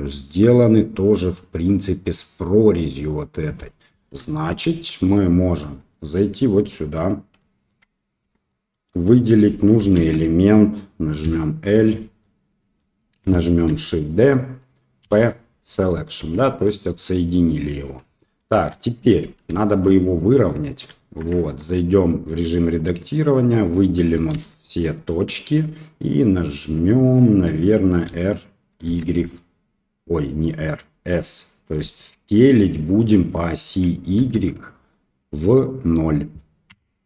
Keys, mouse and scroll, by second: 4.2 shift+middle drag, 4.7 Tab, 5.1 click, 5.6 Tab, 6.1 click, 7.3-7.7 middle drag, 8.2 Tab, 8.4 middle click, 9.9 alt+a, 11.2 l, 12.1 middle click, 13.7 shift+d, 15.0 p, 16.2 Tab, 16.9 click, 18.0 KP_1, 18.5 KP_3, 19.5 shift+middle drag, 20.2 click, 20.9 shift+middle drag, 21.3 Tab, 22.7 click, 23.1 click, 24.3 shift+z, 24.6 click, 28.0 r, 31.7 s.